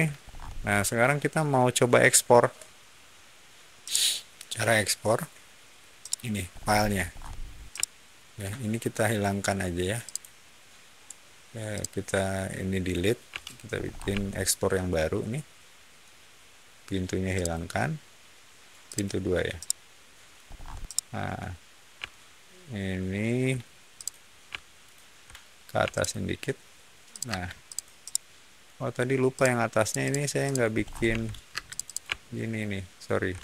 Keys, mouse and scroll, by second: 0.1 scroll down 1, 3.7-5.0 shift+middle drag, 5.9 shift+middle click, 6.4 scroll up 1, 7.0 scroll down 1, 7.6-8.2 shift+middle drag, 10.0 shift+click, 11.6-12.8 shift+drag, 13.2 Delete, 13.7 scroll up 1, 14.1-15.9 shift+middle drag, 17.3 shift+click, 18.8 shift+click, 19.5-20.2 middle drag, 20.4 scroll up 1, 20.7-21.2 middle drag, 21.9-23.3 middle drag, 23.9 shift+click, 24.7 shift+click, 25.7 m, 25.8 click, 27.0 click, 27.2 space, 27.6 click, 28.0-28.5 middle drag, 29.3 click, 29.7 click, 30.4 click, 30.7 middle click, 31.0 f, 31.4 space, 31.6 click, 31.8 click, 32.4-32.9 ctrl+shift+drag.